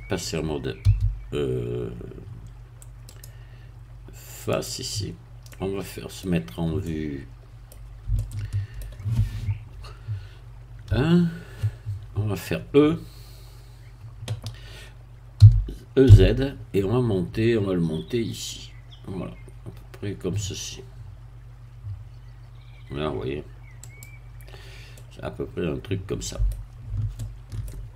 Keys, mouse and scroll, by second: 0.8 a, 3.1 click, 4.5 click, 5.0-5.4 scroll down 1, 5.4 middle click, 6.3 scroll down 1, 6.8-7.8 middle drag, 8.1 shift+middle click, 9.8 3, 10.9 1, 15.4 e, 16.0 z, 23.8 click, 25.0-26.8 middle drag, 27.2 shift+middle click.